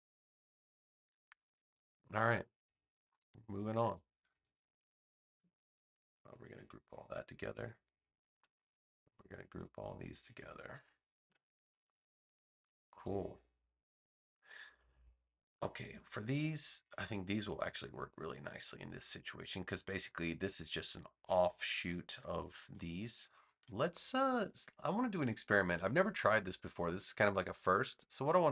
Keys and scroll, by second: 1.1 super+=, 2.1 space, 7.5 super+g, 11.2 super+g, 21.6 super+=, 22.7 space.